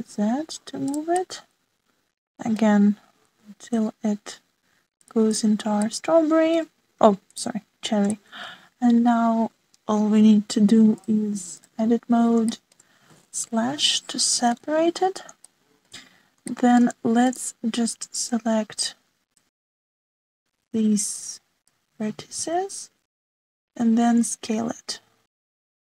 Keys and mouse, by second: 0.2 g, 2.1-3.6 drag, 4.2 g, 6.9-7.4 middle drag, 7.4 click, 9.1 shift+click, 11.9 click, 13.5 shift+click, 13.6 shift+middle click, 14.3 /, 15.4 /, 16.4 shift+middle click, 17.5 shift+middle click, 20.3 click, 21.7 alt+z, 22.2 click, 23.3 alt+z, 24.4 s.